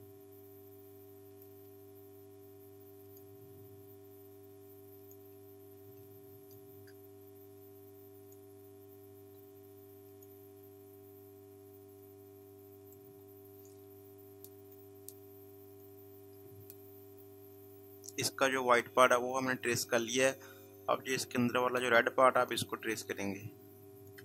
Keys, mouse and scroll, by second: 5.8 space, 6.1 click, 6.3 space, 8.2 click, 12.8 click, 15.4 click, 15.8 click, 22.4 space, 22.5 click, 22.6 click, 22.9 space, 23.2 click.